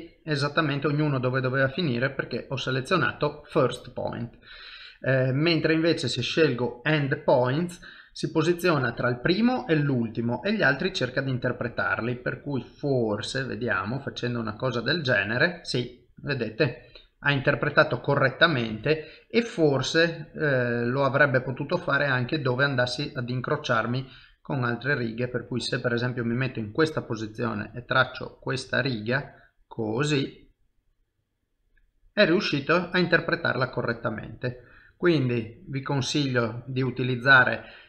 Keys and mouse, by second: 0.5 middle click, 2.7 click, 5.2 click, 10.1 middle click, 12.0 click, 14.8 middle click, 18.7 ctrl+z, 19.0 middle click, 26.9 click, 31.0 middle click, 33.6 click, 36.0 middle click.